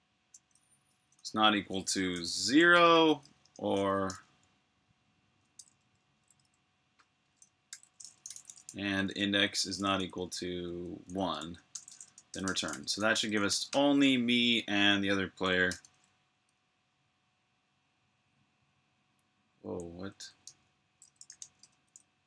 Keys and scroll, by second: 0.6 typing, 2.0-4.0 typing, 5.5 BackSpace, 5.7 BackSpace, 6.1 BackSpace, 6.3 BackSpace, 7.4-9.0 typing, 11.6-13.2 typing, 15.6 super+b, 15.8-16.7 typing, 16.2 super+h, 16.9 super+h, 19.3-21.8 typing.